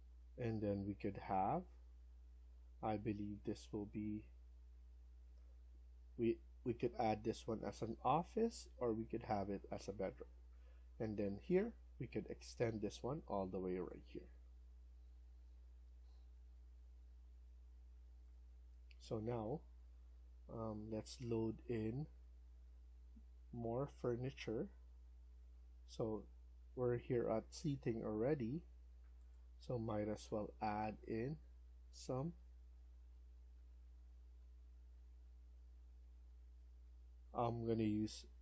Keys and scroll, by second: 15.1 Escape, 30.1 Down, 30.6 Down, 30.8 Down, 31.4 Down, 31.7 Down, 32.2 Down, 32.7 Down, 33.0 Down, 33.4 Down, 33.8 Down, 34.2 Down, 34.8 Down, 36.4 Down.